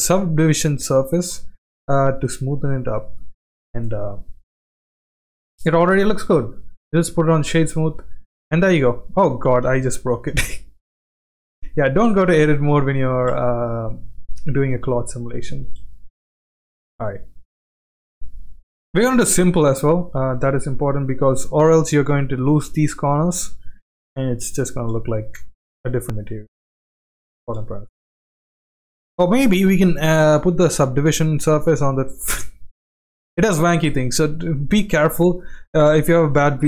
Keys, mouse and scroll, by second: 0.4-1.3 middle drag, 1.7-2.7 middle drag, 3.0-3.6 middle drag, 4.9 middle drag, 5.9 right click, 6.7-7.6 middle drag, 7.9 Tab, 8.3 Tab, 9.6 ctrl+z, 10.1 ctrl+z, 11.6 click, 12.6 space, 13.1 space, 14.1 click, 14.9 Tab, 15.6 space, 17.8 middle click, 17.8 space, 19.1 click, 20.4-20.9 drag, 21.7-22.1 middle drag, 23.1-23.8 middle drag, 24.1-24.5 middle drag, 24.7 space, 25.5 space, 26.9-27.3 drag, 28.5 space, 28.7 space, 29.9-30.9 drag, 32.9 click, 35.1-35.5 shift+middle drag, 36.0-36.6 middle drag.